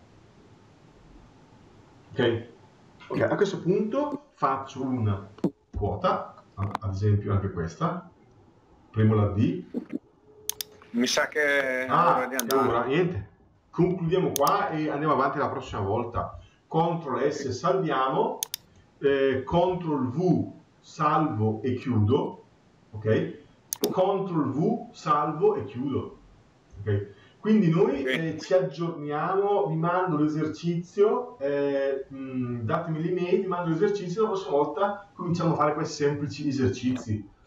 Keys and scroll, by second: 13.6 Escape, 16.0 ctrl+s, 19.3 ctrl+w.